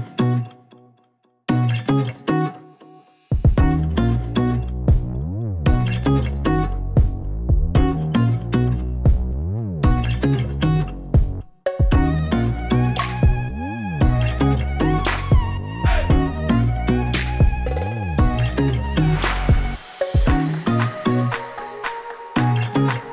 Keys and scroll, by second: 0.9 super+z, 3.8 Down, 12.2 super+d, 13.7 super+d, 20.5 super+c, 20.6 super+v.